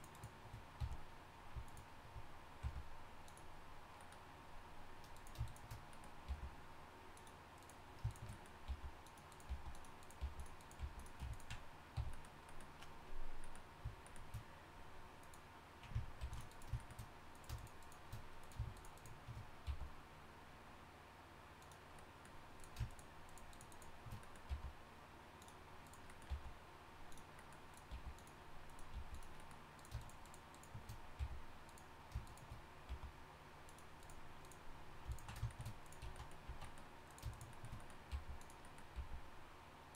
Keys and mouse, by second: 0.8 f, 2.6 g, 6.3 g, 8.7 g, 9.5 g, 10.2 g, 10.8 g, 11.9 f, 15.2-16.2 drag, 16.2 ctrl+r, 19.6 g, 24.5 g, 26.3 g, 27.9 g, 28.9 g, 31.2 f, 32.9 g, 36.0 z, 36.5 z, 38.1 g, 38.9 g.